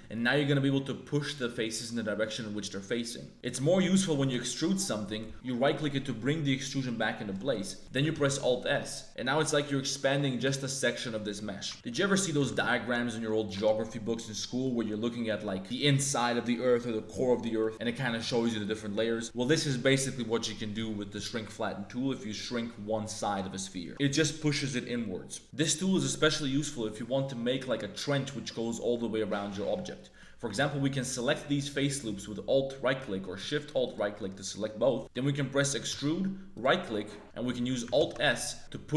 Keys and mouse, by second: 3.3 click, 4.2 e, 7.3 click, 8.1 alt+s, 11.7 e, 12.4 alt+s, 14.4 click, 15.2 middle click, 15.4 click, 17.1 click, 17.4 Tab, 17.6 click, 23.9 Tab, 28.5-30.2 drag, 30.9 alt+click, 33.8 alt+shift+click, 35.0 click, 35.8 e, 38.0 alt+s.